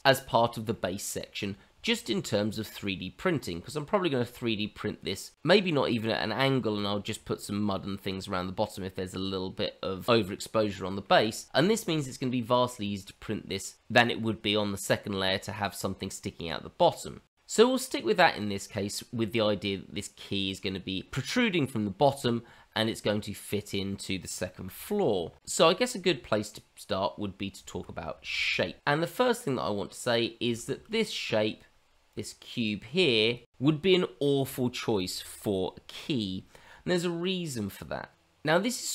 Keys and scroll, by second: 24.0 f, 27.6 shift+z, 30.7 shift+z, 32.4 f, 32.8 shift+z.